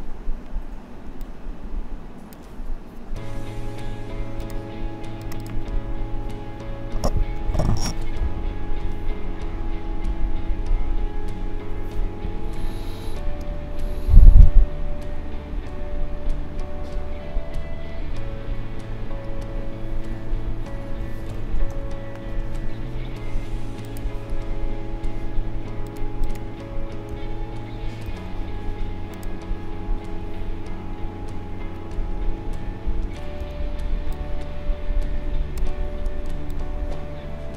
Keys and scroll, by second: 1.1 space, 7.1 c, 13.4 space, 21.0 c, 21.7 Return, 27.1 ctrl+a, 28.1 ctrl+c, 31.5 ctrl+v, 33.4 v, 36.3 space.